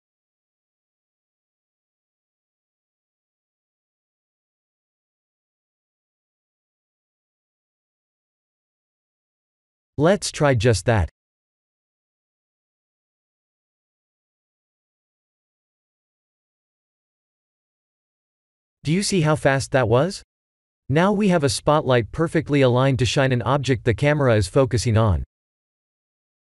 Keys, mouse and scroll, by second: 0.7 shift+a, 3.7 click, 8.4 x, 10.0 click, 11.7 KP_0, 14.3 shift+a, 17.3 click, 23.4 x.